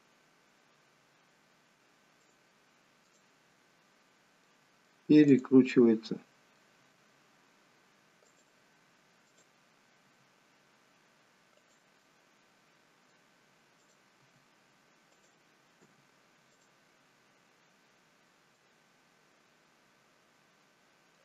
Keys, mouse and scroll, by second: 3.2 click, 4.5 middle click, 5.4 click, 5.8 middle click, 6.9 r, 9.3 click, 10.1 r, 12.0 middle click, 13.9 click, 14.4 r, 16.0 g, 18.7 middle click.